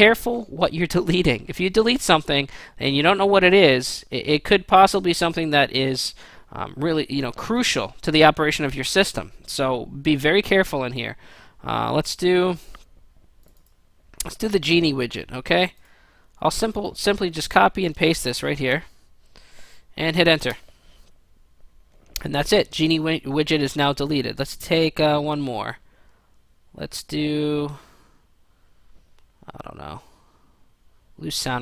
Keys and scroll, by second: 18.5 ctrl+v, 20.5 Return.